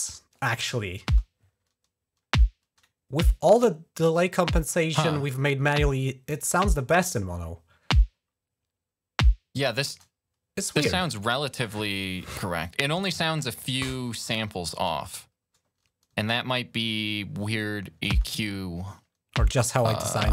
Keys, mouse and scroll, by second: 1.0 space, 3.9 click, 4.1 click, 9.7 space, 17.9 space.